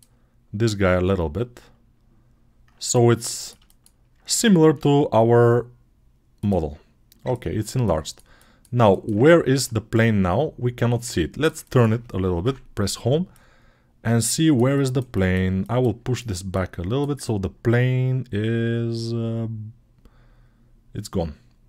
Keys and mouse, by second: 0.6 s, 4.5 s, 9.4 Tab, 12.3 Home, 16.4-21.6 drag.